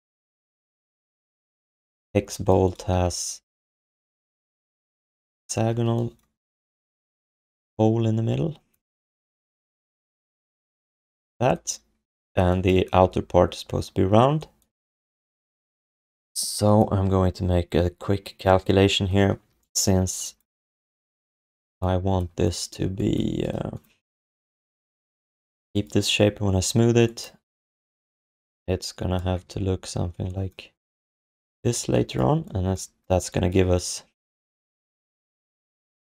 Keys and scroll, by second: 2.9 r, 5.6 f, 8.9 w, 11.0 r, 21.3 q, 24.6 BackSpace, 31.7 q.